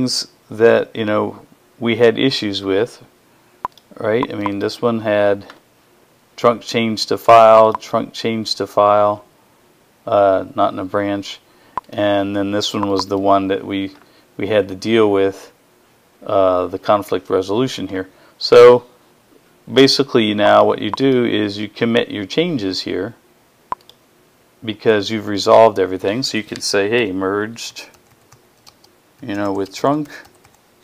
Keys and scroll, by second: 26.6-30.7 typing.